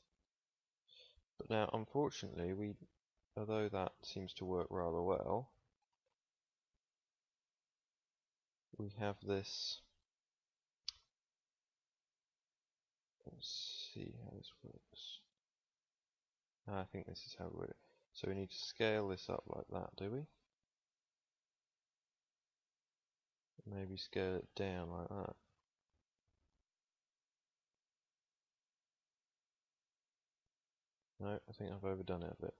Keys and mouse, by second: 4.0-7.4 middle drag, 10.9 s, 14.2 click, 16.8-18.1 middle drag, 18.1 s, 23.4 s, 28.7 Tab, 32.0 s.